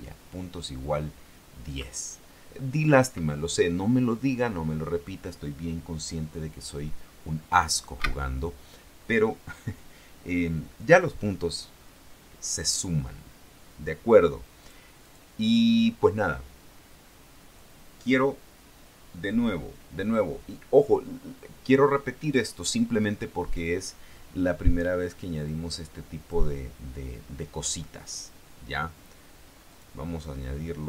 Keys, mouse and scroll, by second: 8.2 Escape, 14.8 click, 15.2 click, 25.6 click, 29.9 click.